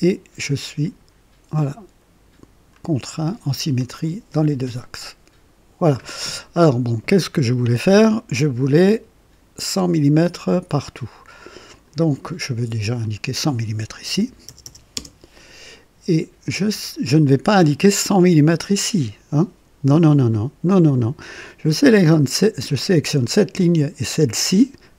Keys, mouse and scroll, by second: 11.7 click, 13.0 click, 14.1 KP_1, 14.4 KP_0, 14.6 KP_0, 14.9 Return, 16.5 click, 17.6 click, 22.0 click, 24.0 click.